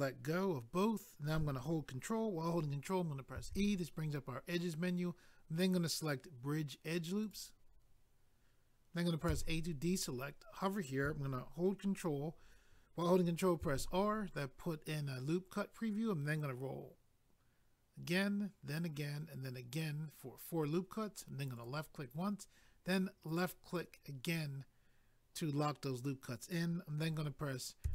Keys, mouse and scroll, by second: 3.3 ctrl+e, 7.2 click, 7.3 click, 9.2 a, 13.6 ctrl+r, 16.8-18.1 scroll up 1, 18.5-19.4 scroll up 1, 19.4-19.8 scroll up 1, 21.6 click, 21.7 click, 23.3 click, 23.4 click, 27.8 a.